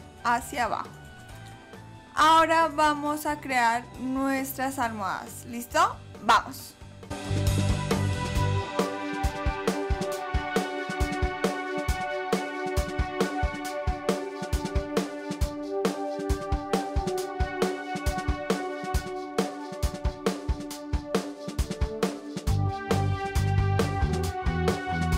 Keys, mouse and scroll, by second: 0.5 click, 7.3 click, 8.0 click, 8.9 click, 9.1 click, 10.5 s, 12.0 middle click, 12.4 s, 13.1 click, 13.7 ctrl+s, 13.9 click, 14.6 scroll up 1, 14.7 middle click, 15.0 click, 15.4 KP_7, 15.7 click, 16.5 click, 16.8 s, 17.4 right click, 17.7 right click.